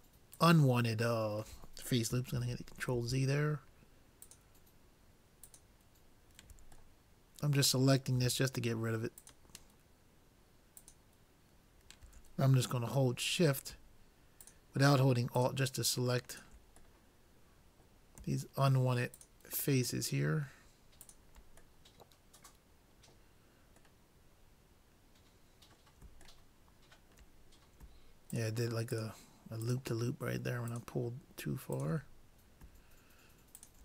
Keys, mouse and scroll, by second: 2.5 ctrl+z, 4.3-7.0 drag, 7.0-8.7 middle drag, 9.2-12.5 drag, 12.9-14.4 middle drag, 14.4-17.2 drag, 17.1-18.7 middle drag, 17.3 click, 19.2-20.8 drag, 21.1-22.9 drag, 21.9 middle click, 22.5 middle click, 22.9-25.9 middle drag, 26.5-28.1 middle drag, 28.3-33.5 drag, 33.6-33.8 drag.